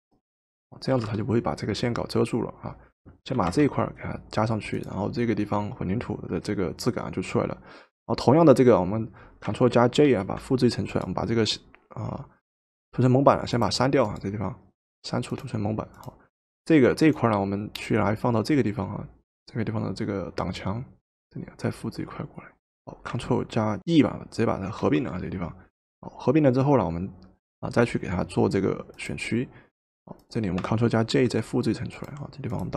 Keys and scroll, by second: 1.0 v, 3.4 v, 10.0 ctrl+j, 24.8 ctrl+e, 31.1 ctrl+j.